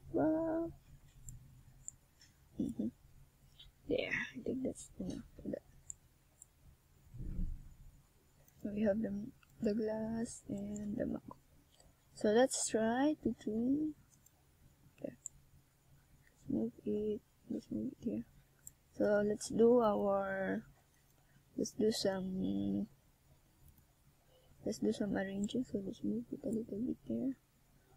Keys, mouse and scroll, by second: 0.3 click, 2.3 middle click, 4.2 KP_7, 5.7 Tab, 6.6 right click, 7.4 shift+right click, 7.9 right click, 8.4 click, 9.2 s, 10.0 click, 10.6 click, 11.4 s, 11.8 click, 11.9 right click, 12.4 shift+right click, 13.0 click, 14.3 a, 14.7 Tab, 15.4 Tab, 16.8 right click, 17.5 right click, 18.1 right click, 18.4 shift+right click, 18.5 shift+right click, 18.7 right click, 19.0 shift+right click, 19.0 s, 19.5 click, 19.7 right click, 20.0 shift+right click, 20.4 s, 21.1 shift+right click, 21.3 s, 21.9 click, 22.2 s, 22.6 click, 23.0 right click, 23.3 shift+right click, 23.6 shift+right click, 23.8 s, 24.5 click, 24.8 right click, 25.3 shift+right click, 25.6 shift+right click, 26.1 s, 26.8 shift+right click, 27.1 shift+right click, 27.4 s.